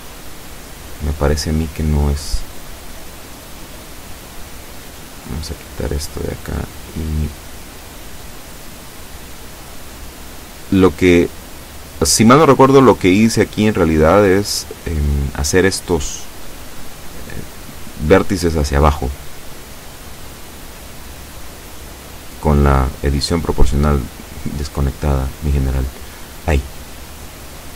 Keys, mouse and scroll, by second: 0.1 middle click, 1.6 z, 4.0 click, 5.2 right click, 5.8 shift+right click, 7.4 shift+right click, 8.2 shift+right click, 9.1 shift+right click, 9.9 shift+right click, 10.6 shift+right click, 11.8 shift+right click, 12.7 shift+right click, 14.1 shift+right click, 14.9 shift+right click, 15.6 shift+right click, 16.9 shift+right click, 17.5-19.9 shift+middle drag, 20.7-21.9 drag, 21.9 ctrl+z, 22.7 o, 23.2-26.3 drag, 26.6 o, 27.0 click, 27.6-27.7 scroll up 2.